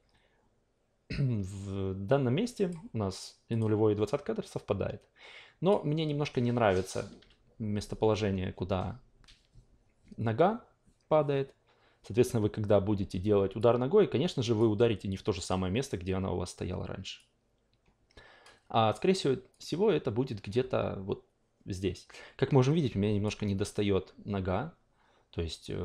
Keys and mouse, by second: 3.6 click, 4.4-5.7 drag, 7.2 w, 13.6-14.6 drag, 17.1-18.6 drag, 19.5-23.2 drag.